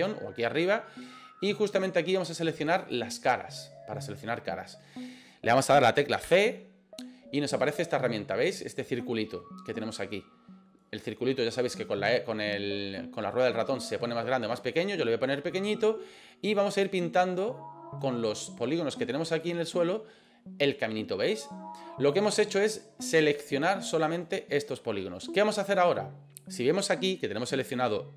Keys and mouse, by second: 2.8 click, 6.2 c, 25.7 right click.